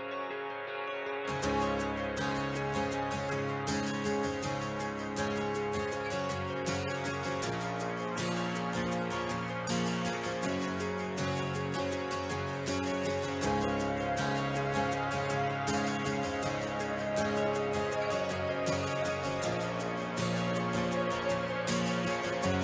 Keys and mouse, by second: 0.7 KP_0, 1.8 ctrl+middle click, 2.3 s, 4.1 click, 5.5 click, 7.4 click, 17.0 right click, 18.5 middle click, 20.6 click, 21.8-22.6 drag.